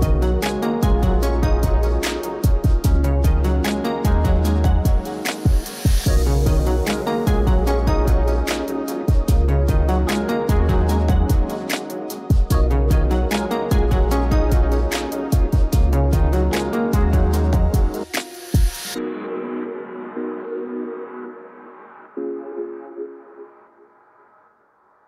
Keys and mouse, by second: 0.3 click, 0.8 KP_0, 1.8 alt+shift+z, 1.9 alt+shift+z, 2.5 ctrl+click, 5.4 click, 6.2 click, 7.1 click, 7.6 n, 8.1 alt+shift+z, 8.2 alt+shift+z, 8.9 ctrl+s, 9.7 alt+shift+z, 10.2 click, 10.5 click, 11.1 n, 11.8 click, 12.0 click, 14.1 click, 15.2-16.2 drag, 16.2 middle click, 17.2 alt+shift+z, 18.3 alt+shift+z, 18.9 click, 19.6 alt+shift+z, 21.5 ctrl+s, 22.1 Escape, 24.4 z.